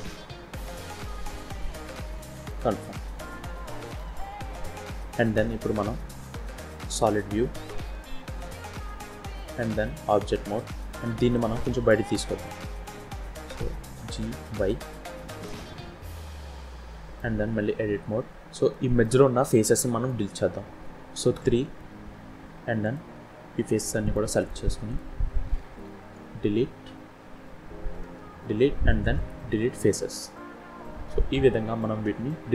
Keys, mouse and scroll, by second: 2.7-3.9 scroll down 8, 3.9 middle click, 6.0 z, 7.4-9.0 scroll down 3, 10.0 Tab, 11.1 scroll down 1, 11.2 middle click, 13.9 g, 15.6 middle click, 17.1-17.6 scroll up 2, 17.6 Tab, 18.0-18.6 scroll up 2, 18.6 scroll up 1, 18.6 shift+middle click, 19.5-20.0 scroll up 3, 20.0 middle click, 21.3 3, 22.7 click, 23.5 shift+click, 23.9 shift+click, 24.4 click, 24.8 shift+click.